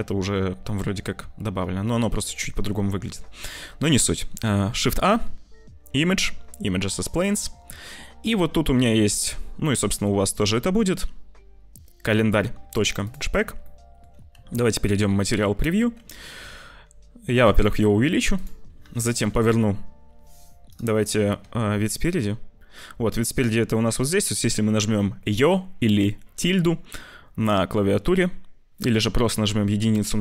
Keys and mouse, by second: 2.6 ctrl+s, 4.7 shift+a, 13.6 click, 14.2 z, 16.3 s, 17.5 click, 17.9 s, 18.7 r, 21.3 `, 22.7 click, 23.3 `, 29.3 KP_1.